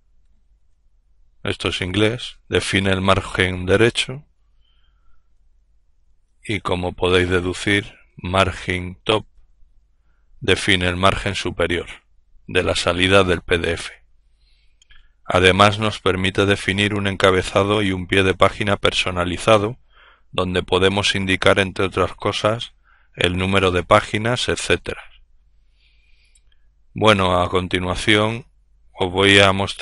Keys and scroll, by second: 0.0-0.3 typing, 4.7-9.2 typing.